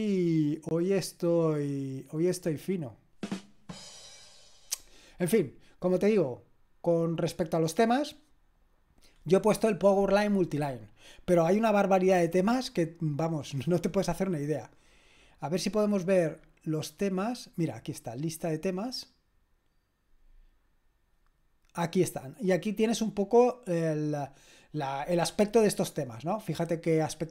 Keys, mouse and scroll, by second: 2.6 click, 6.1 click, 18.5 click.